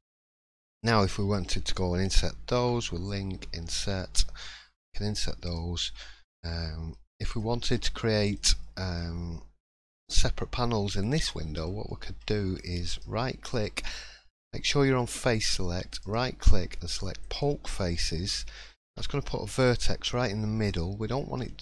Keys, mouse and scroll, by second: 0.4 middle click, 0.9 shift+middle click, 1.5-1.8 scroll down 1, 2.6 l, 3.7 i, 5.9 scroll down 1, 6.6 middle click, 6.9 scroll up 1, 7.3 click, 8.2 click, 8.6 shift+middle click, 9.0-9.6 scroll up 2, 11.2 middle click, 11.8 shift+middle click, 12.2 scroll up 2, 12.9 right click, 18.8 1, 19.6 click, 20.5-20.9 scroll up 2, 21.1 shift+middle click.